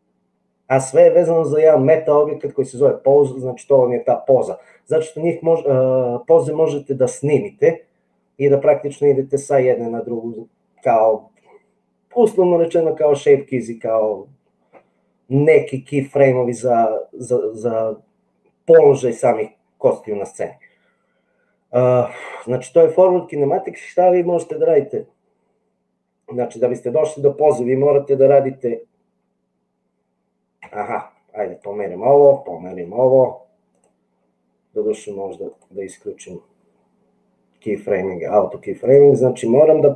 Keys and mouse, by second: 30.7 g, 32.8 g, 38.8 click.